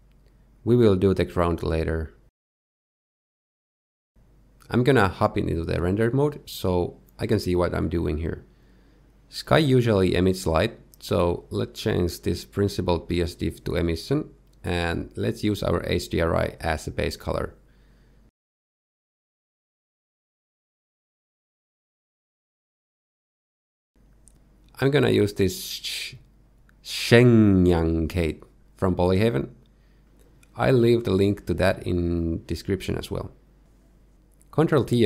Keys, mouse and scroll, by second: 2.5 click, 3.8 click, 5.0 click, 5.7 shift+middle click, 6.1 z, 7.6 shift+middle click, 8.2 shift+middle click, 9.2-9.7 scroll up 1, 9.7-10.3 scroll up 3, 10.3 click, 11.7 x, 12.0 shift+a, 13.4 s, 15.0 alt+right click, 17.5 click, 22.8 click, 30.9 middle click, 32.7 middle click, 33.4 shift+middle click, 34.4 click.